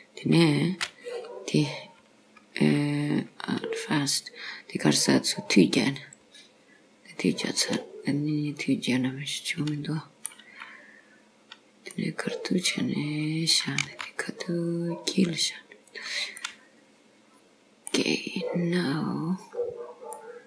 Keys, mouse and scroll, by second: 0.4 m, 7.6 middle click, 11.9 middle click, 13.9 g, 16.5 middle click, 18.0-19.0 scroll down 1, 19.6-20.2 scroll up 3, 20.2 middle click.